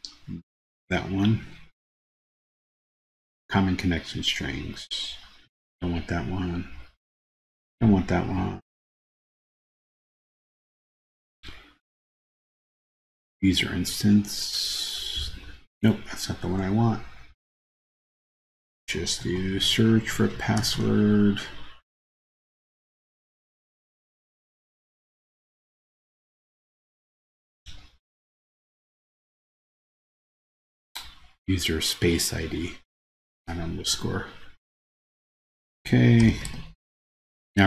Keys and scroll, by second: 19.3 super+f.